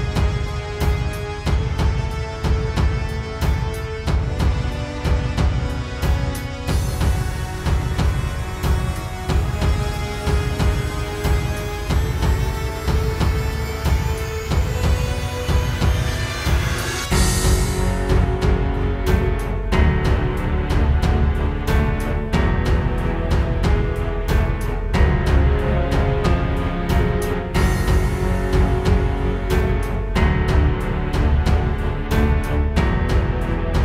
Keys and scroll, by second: 0.1 space, 1.5 space, 2.0 super+space, 10.8 space, 11.6 super+space, 13.9 space, 15.1 super+space, 15.8 super+space, 16.3 super+space, 16.8 space, 28.8 space, 29.2 space, 29.8 super+space.